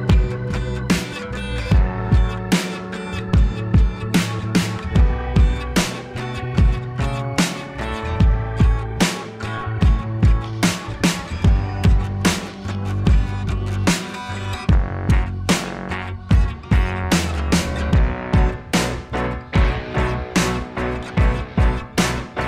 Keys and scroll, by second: 2.7 Down, 2.8 Right, 5.1 Right, 5.6 Delete, 5.8 Right, 5.9 Left, 6.0 ctrl+=, 6.3 space, 6.7 ctrl+a, 7.7 ctrl+z, 8.5 ctrl+a, 9.4 ctrl+a, 10.8 Delete, 11.5 Delete, 12.2 Delete, 12.8 ctrl+-, 12.8 space, 17.1 ctrl+z.